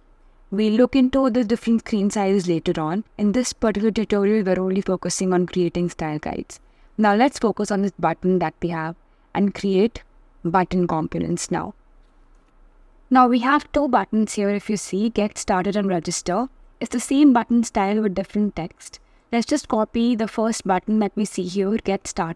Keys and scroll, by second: 22.2 super+c.